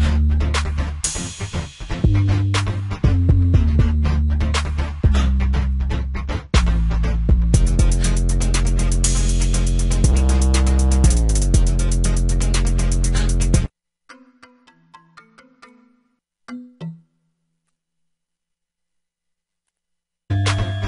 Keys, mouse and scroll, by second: 6.8 F1, 13.1 F1.